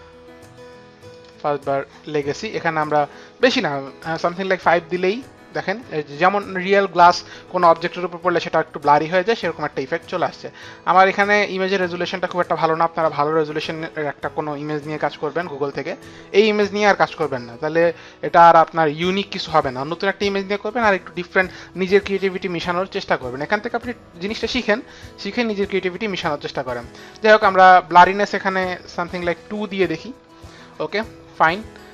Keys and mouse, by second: 1.1 click, 2.7 click, 4.3 KP_5, 4.5 Return, 29.2 KP_2, 29.5 Return.